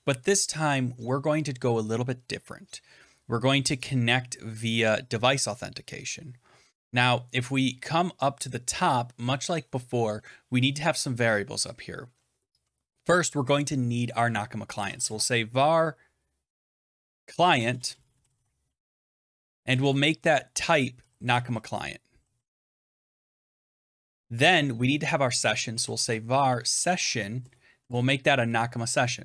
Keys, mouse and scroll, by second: 8.4 click, 8.8 click, 14.4-15.4 typing, 16.6-23.5 typing, 23.6 Tab, 24.0 Return, 25.3-29.2 typing.